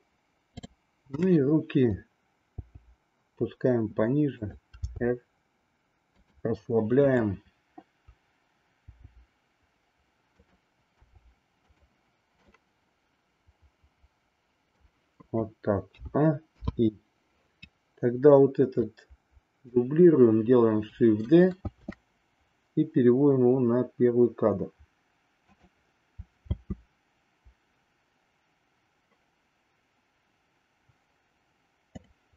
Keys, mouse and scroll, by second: 2.5 g, 4.7 r, 7.0-8.5 drag, 8.9 g, 11.0 r, 12.4-14.9 middle drag, 15.9 a, 16.5 i, 18.7-19.8 drag, 21.6 shift+d, 26.4 space.